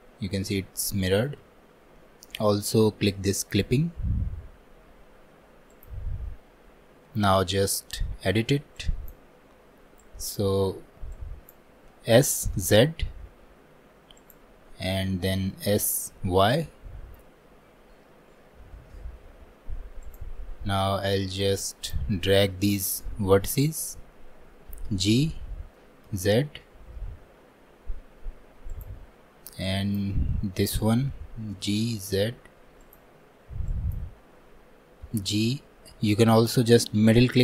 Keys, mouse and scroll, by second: 3.5-12.2 drag, 12.2 s, 21.7-24.7 drag, 29.7-37.4 drag.